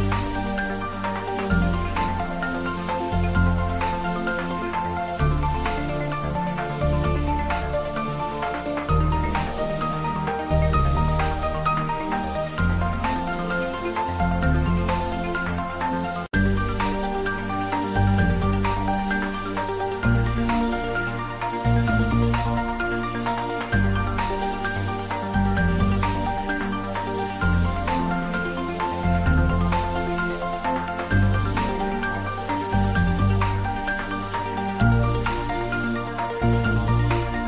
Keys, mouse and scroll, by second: 0.6 click, 2.2 click, 3.6 g, 6.1 c, 6.7 right click, 7.6 g, 10.0 click, 11.1 r, 12.5 click, 12.9 h, 13.4 ctrl+z, 13.8 g, 16.3 click, 16.7 ctrl+middle click, 17.1 shift+middle click, 17.6-18.5 typing, 20.4 click, 20.7 ctrl+s, 23.8 click, 24.3 ctrl+middle click, 25.2 g, 28.6 Down, 29.8 click, 31.3 ctrl+z, 31.9 click, 34.8-35.7 typing.